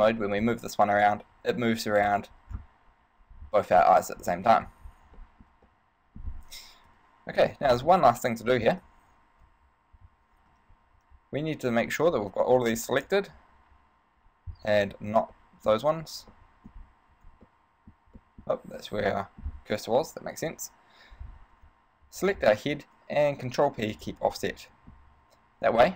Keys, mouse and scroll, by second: 0.8 g, 2.5 right click, 2.8 scroll down 1, 3.5 scroll up 1, 3.6 scroll down 1, 4.1 middle click, 4.8 ctrl+Tab, 5.4 shift+middle click, 5.9 middle click, 7.1 KP_3, 7.5 Tab, 9.0 alt+h, 9.6 a, 10.7 b, 15.1 b, 16.5 shift+middle click, 16.9 scroll down 2, 17.3 z, 17.7 middle click, 18.4 middle click, 19.0 ,, 19.3 middle click, 20.2 KP_1, 20.7 KP_3, 21.6 z, 22.4 shift+right click, 24.1 ctrl+p, 24.7 middle click, 25.4 a.